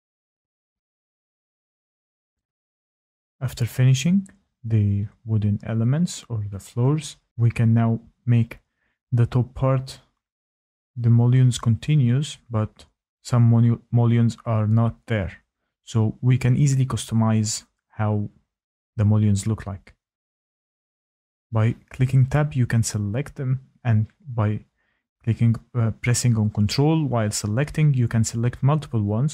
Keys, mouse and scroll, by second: 0.1 click, 0.1 click, 0.2 Tab, 0.4 click, 0.5 click, 0.6 ctrl+v, 0.6 click, 0.6 click, 0.7 click, 0.7 Tab, 0.9 click, 1.0 click, 1.0 click, 1.1 click, 1.1 ctrl+v, 1.1 click, 1.2 click, 1.5-2.1 scroll, 2.1-3.1 scroll, 3.1 click, 3.1-3.5 scroll, 9.1-10.6 scroll, 10.6-11.3 scroll, 11.3-11.9 scroll, 12.0-12.6 scroll, 12.6 scroll, 13.3-17.0 scroll, 17.2 click, 19.1 Tab, 19.7 click, 20.7 Tab, 21.5 ctrl+click, 23.0 Tab, 23.4 Tab, 24.1 ctrl+click, 25.1 Tab, 25.8 ctrl+click, 26.5 middle click, 26.6 middle click, 26.9 middle click, 28.1 click, 29.2 click, 29.2-29.3 scroll.